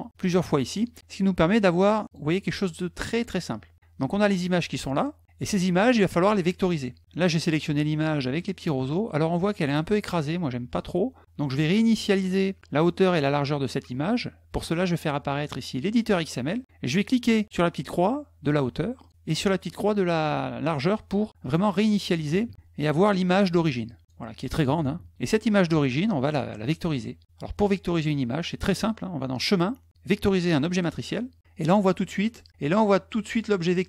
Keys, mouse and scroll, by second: 1.3 click, 2.0 click, 2.3 click, 2.9 click, 3.6 click, 3.9 click, 5.1 click, 5.3 click, 7.2 middle click, 14.5 click, 15.8 click, 18.8 click, 21.3 click, 22.8 middle click, 23.6 click, 29.1 click, 30.5 click.